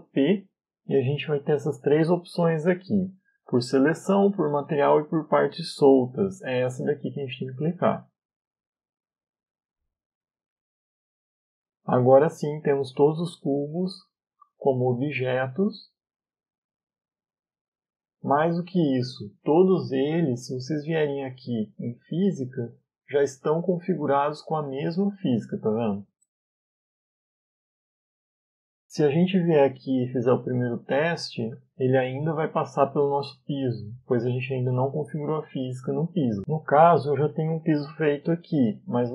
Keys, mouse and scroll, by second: 0.5 p, 10.9 middle click, 12.1 Tab, 12.8 right click, 13.5 middle click, 14.2 right click, 14.7 right click, 15.2 right click, 15.7 right click, 16.2 right click, 17.5 middle click, 21.0 click, 22.7 click, 23.9 right click, 24.8-25.6 scroll down 4, 26.4 right click, 26.9 right click, 27.5 right click, 28.1 right click, 29.4 middle click, 30.2 a, 30.5 a, 31.8 click, 32.9 click, 34.2 click, 35.2 click, 36.7-37.2 scroll down 3, 37.2 right click, 38.3 right click, 39.0 middle click.